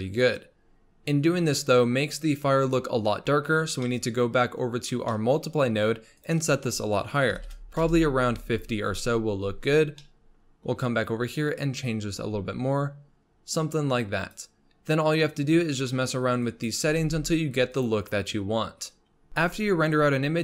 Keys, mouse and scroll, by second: 0.5-3.5 scroll down 3, 3.5 scroll down 2, 3.8-5.5 middle drag, 5.5-6.2 scroll up 3, 6.2-10.0 drag, 10.0-11.5 middle drag, 11.5-14.8 drag, 14.8-15.9 scroll down 8, 15.9 middle click, 16.1-16.5 scroll up 2, 16.5-17.0 drag, 17.0 g.